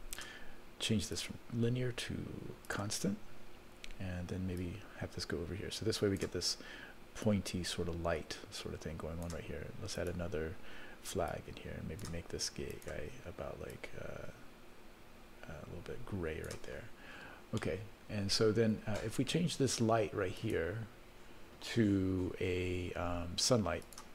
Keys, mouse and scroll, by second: 1.1-3.1 drag, 4.6-6.2 drag, 7.2-9.3 drag, 10.0 click, 11.3 click, 12.7 click, 17.6-18.7 middle drag, 18.9-19.2 scroll down 1, 19.4-20.4 scroll down 1, 20.4 click, 20.4 scroll up 2, 23.8 click.